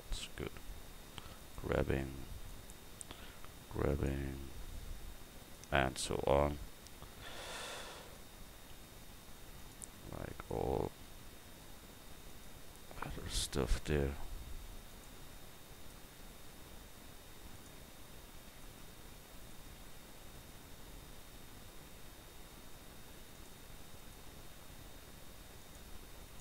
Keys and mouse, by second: 2.3-5.1 drag, 3.0 g, 5.4-7.1 drag, 8.0-9.6 drag, 10.3-12.3 drag, 13.2-14.9 drag, 15.7-17.5 drag, 19.2 Tab, 19.5-21.1 right drag, 19.8 Tab, 22.2 g, 23.3-25.6 right drag, 24.7 g, 26.3-26.4 right drag.